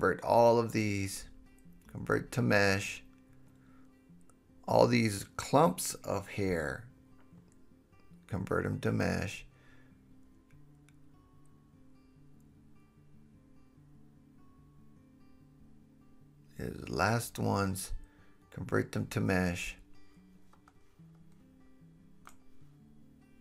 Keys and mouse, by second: 0.2 h, 1.0 shift+middle click, 2.0-4.5 drag, 4.0 h, 4.5 shift+middle click, 5.2-9.6 drag, 7.6 h, 9.6 middle click, 10.0-11.9 drag, 11.9 shift+middle click, 12.9-17.0 drag, 16.0 h, 17.0-18.2 shift+middle drag, 18.2-19.2 drag, 19.2-23.2 middle drag, 21.9 h, 22.2 h, 23.2-23.4 drag.